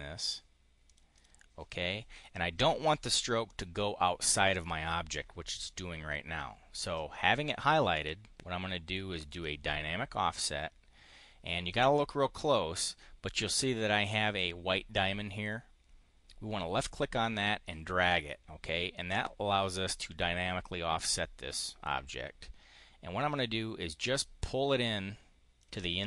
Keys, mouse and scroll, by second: 0.7 click, 1.0 click, 1.9 click, 3.3 click, 7.8 click, 9.2 click, 17.1-25.6 drag.